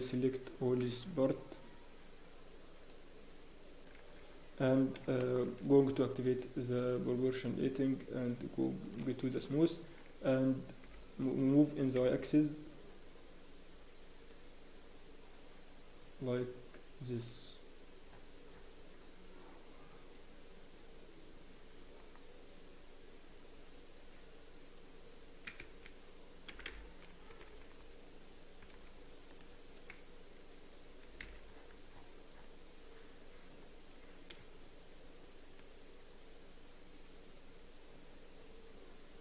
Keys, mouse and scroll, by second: 0.8 b, 4.8 scroll down 1, 5.2 shift+middle click, 6.1 click, 6.1-6.4 scroll down 1, 11.6 g.